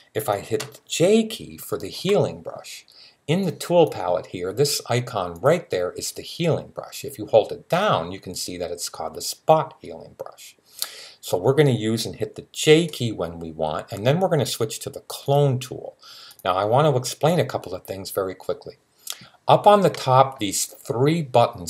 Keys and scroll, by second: 1.7 j.